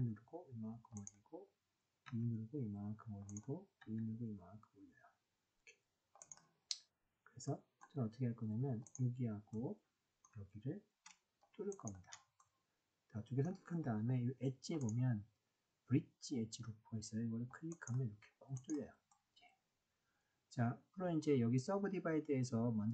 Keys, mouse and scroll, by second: 0.9 click, 2.0 e, 3.2 click, 6.1 click, 7.4 middle click, 9.4 middle click, 11.7 shift+click, 12.3-13.4 middle drag, 14.8-17.8 drag, 19.1-22.9 middle drag.